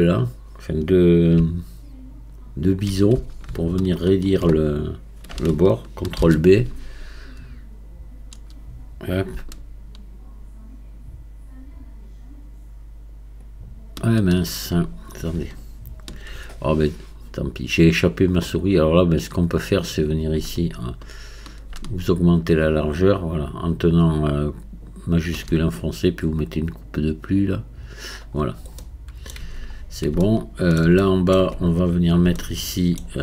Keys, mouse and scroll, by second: 2.6-4.6 alt+drag, 4.6-6.2 scroll up 3, 6.2 ctrl+b, 27.7 click, 28.3-28.8 scroll down 4, 28.8 middle click, 29.4 Tab, 29.7-30.2 scroll down 2, 30.2-31.3 shift+middle drag, 31.3 Tab, 31.9-32.3 scroll up 1, 32.3 shift+middle click.